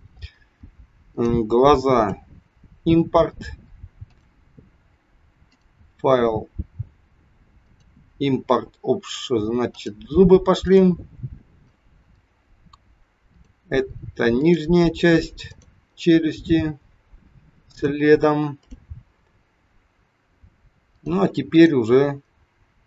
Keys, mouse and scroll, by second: 4.0 click, 5.4 click, 13.3 click, 20.9 click, 21.5 click.